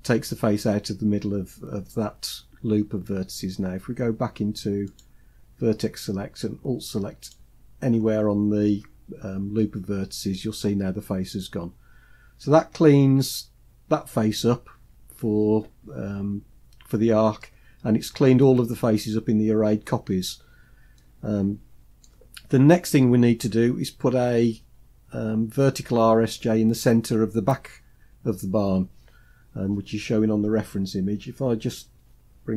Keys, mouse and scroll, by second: 4.7-6.1 drag, 7.0 alt+click, 12.0-12.9 scroll down 2, 12.9-14.4 scroll down 2, 14.4-16.8 scroll down 5, 20.1-20.7 scroll down 1, 20.7 scroll down 2, 20.7-22.1 middle drag.